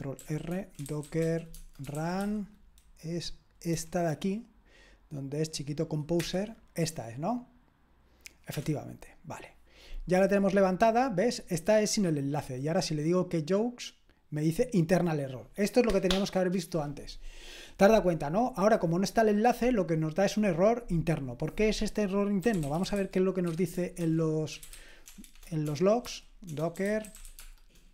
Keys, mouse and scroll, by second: 0.2 ctrl+r, 0.3-2.7 typing, 3.7 Down, 6.2 Return, 8.5 Return, 12.7 click, 22.2-27.9 typing, 23.5 Escape, 24.0 super+h.